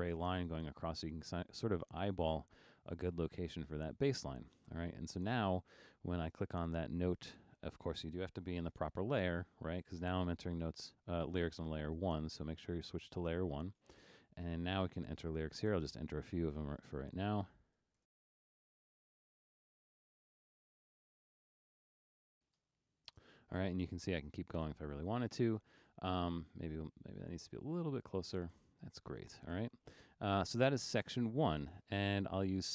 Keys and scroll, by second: 12.1 alt+super+1, 17.8-23.2 typing.